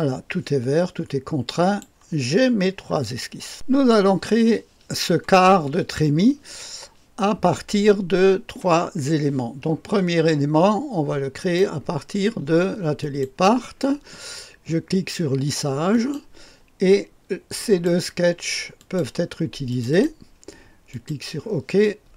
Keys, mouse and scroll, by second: 1.4 click, 3.5 click, 11.3 click, 12.9 click, 15.9 click, 17.5 click, 18.7 click, 19.7 click, 19.8 click, 20.8 click, 21.8-22.1 drag.